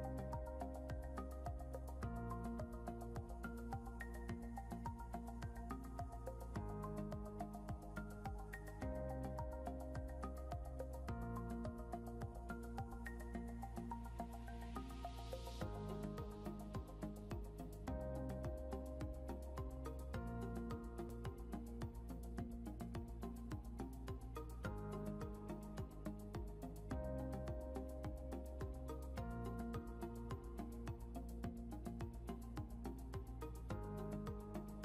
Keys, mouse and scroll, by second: 3.3 scroll down 1, 4.8 click, 8.6 scroll down 1, 17.9 click, 20.4 b, 24.2-30.2 typing, 32.4 click.